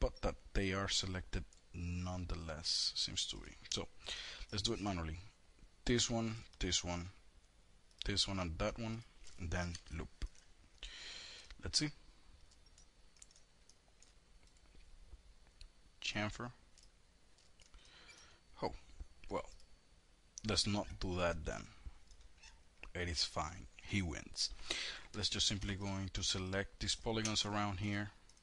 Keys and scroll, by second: 8.8 alt+l, 24.2 4.